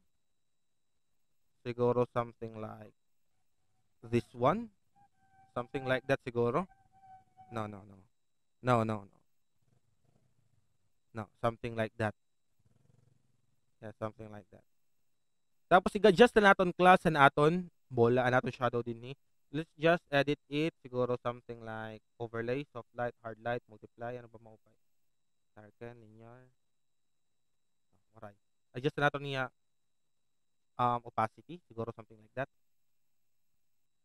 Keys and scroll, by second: 8.0 alt+space, 16.4 alt+space.